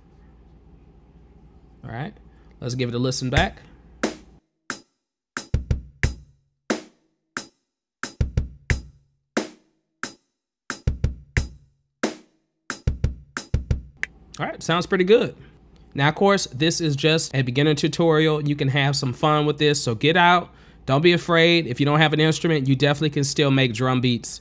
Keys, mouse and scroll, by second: 0.6 click, 2.2 click, 3.2 ctrl+space, 3.2 click, 5.3 space, 14.7 space, 21.8 click.